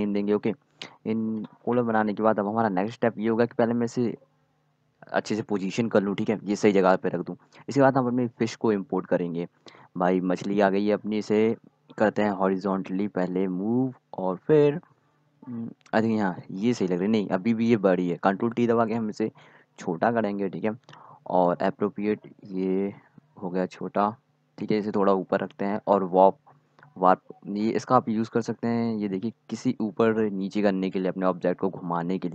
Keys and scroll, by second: 0.0-2.1 typing, 4.7 ctrl+t, 20.2 ctrl+t.